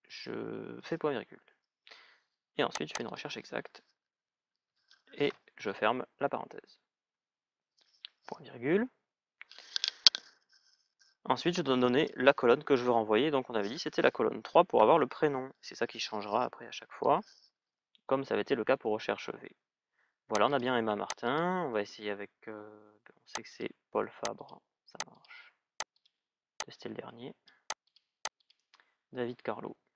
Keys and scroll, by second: 14.6 shift+", 16.7 Return.